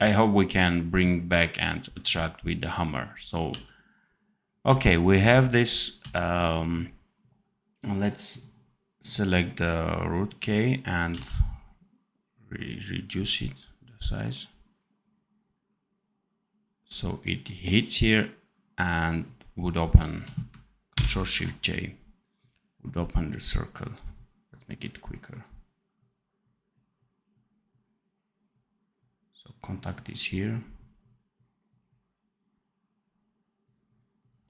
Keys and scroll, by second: 3.4 d, 11.0 x, 20.8 ctrl+shift+j.